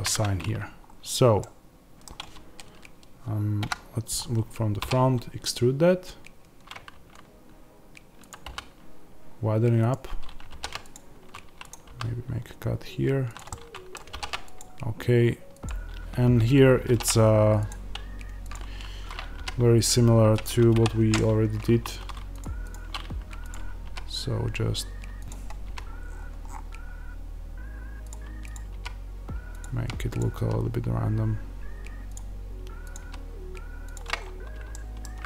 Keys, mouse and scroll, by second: 0.0-9.8 middle drag, 0.8-1.3 scroll up 2, 3.5 KP_1, 4.1-4.7 scroll down 2, 4.7 e, 9.8-13.3 drag, 11.8 s, 13.4 middle click, 15.6 click, 18.4 click, 19.3 g, 20.3 click, 20.6 o, 21.6 1, 23.4 click, 23.8 g, 25.2 click, 25.6 g, 28.0 click, 28.6 g, 29.5 click, 30.3 g, 32.0 click, 32.9 g, 34.1-34.6 scroll.